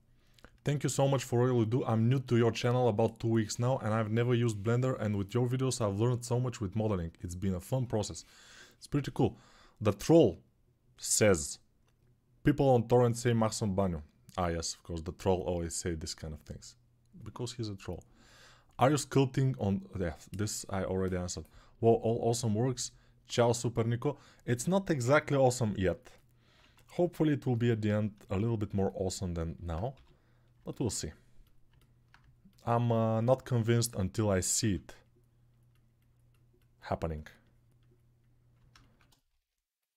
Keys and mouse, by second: 25.7-39.9 alt+drag, 26.7 ctrl+1, 29.7 g, 34.4 ctrl+r.